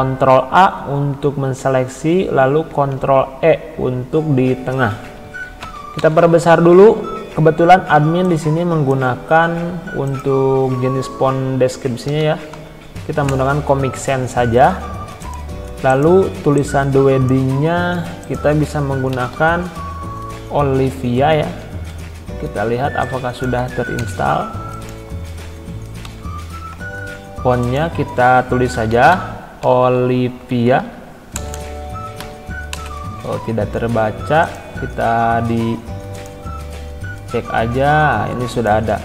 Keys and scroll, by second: 4.8 ctrl+e, 5.6 ctrl+], 11.8-13.0 typing, 13.3 Return, 18.9-19.8 typing, 21.9 i, 24.3 BackSpace, 28.5-32.7 typing, 33.0 Caps_Lock.